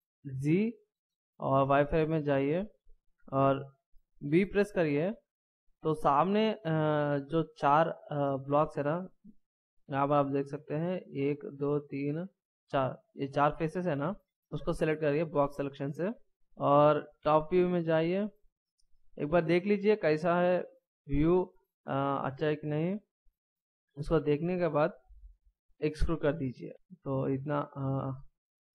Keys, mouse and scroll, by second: 0.5 z, 4.5 b, 9.9 scroll up 2, 14.1-17.0 scroll down 1, 17.1 KP_7, 18.6-19.9 scroll down 1, 19.9-20.4 shift+scroll up 1, 21.2-21.7 ctrl+scroll up 1, 22.7-23.0 ctrl+scroll down 1.